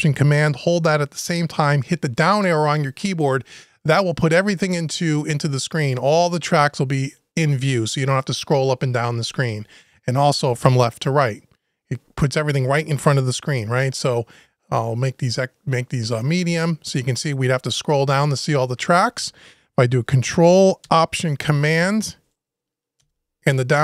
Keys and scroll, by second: 22.8 ctrl+alt+super+Down.